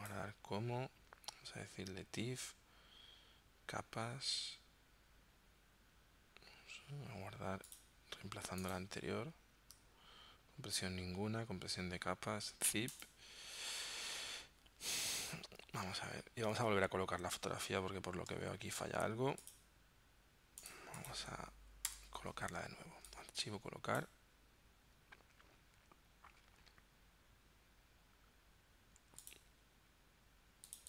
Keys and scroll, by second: 16.1 super+w, 16.8 super+Tab, 22.0 BackSpace.